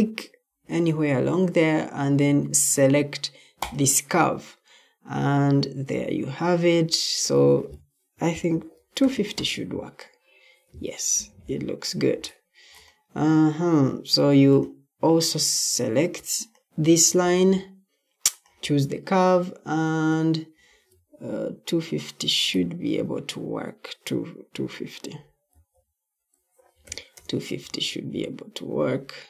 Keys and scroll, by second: 8.2-9.4 typing, 10.9 Escape, 15.6 Escape, 25.5-27.2 typing.